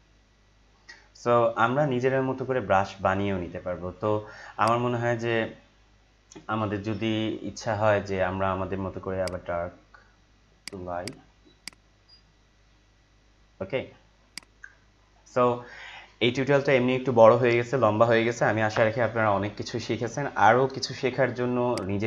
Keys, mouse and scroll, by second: 4.6-6.9 drag, 6.7 z, 9.2-21.7 drag.